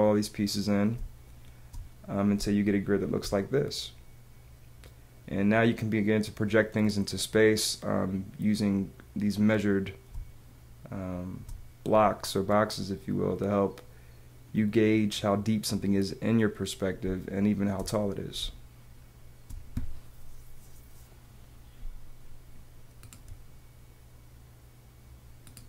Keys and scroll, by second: 0.9 space, 2.3 space, 10.1 space, 17.0 space, 18.3 space.